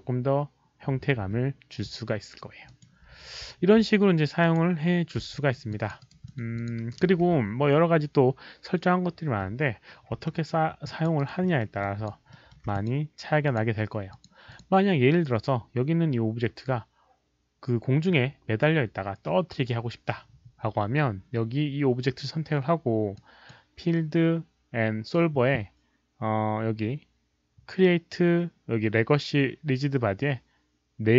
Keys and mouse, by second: 0.5 Return, 0.5 click, 0.5 KP_1, 0.8 Return, 1.9 click, 2.7 click, 4.4 click, 5.3 alt+middle click, 5.7 alt+click, 5.9 alt+right click, 6.2 alt+middle click, 6.5 alt+click, 6.7 alt+right click, 7.2 q, 10.2 alt+middle drag, 10.8 alt+click, 11.1 alt+right click, 11.4 alt+middle click, 11.8 alt+click, 11.8 q, 12.3 alt+middle click, 12.7 alt+click, 13.4 alt+click, 13.4 alt+middle click, 13.4 alt+right click, 13.4 q, 14.1 alt+click, 14.1 alt+middle click, 14.1 alt+right click, 14.1 q, 14.4 alt+click, 23.1 click, 24.3 click, 25.0 click.